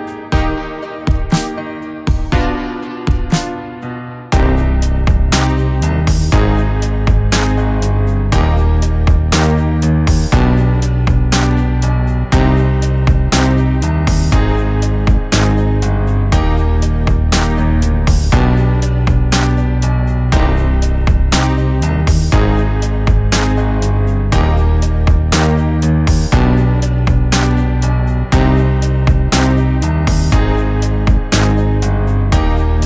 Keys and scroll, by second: 13.5 ctrl+z, 13.7 ], 13.7 ], 14.4 ctrl+z, 14.9 [, 16.2 ctrl+t, 27.7 ctrl+t.